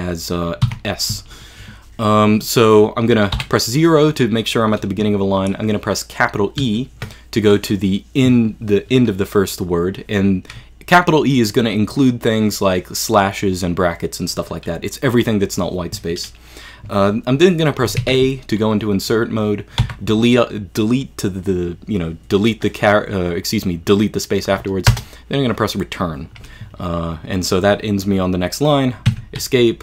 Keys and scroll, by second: 0.7 s, 3.4 0, 6.6 shift+e, 18.0 a, 19.8 Delete, 24.9 Return, 29.1 Escape.